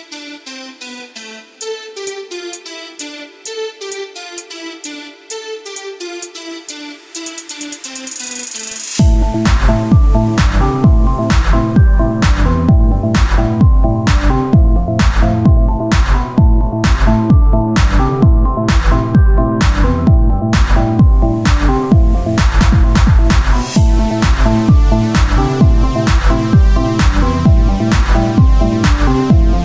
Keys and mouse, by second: 2.6 z, 4.8 Tab, 5.2 z, 6.0 ctrl+Tab, 10.0-13.0 drag, 10.0 o, 13.0 Tab, 15.6 KP_1, 16.1 z, 19.2-20.6 drag, 20.6 o, 21.0 s, 23.7 Tab, 27.8 KP_1, 28.6 z.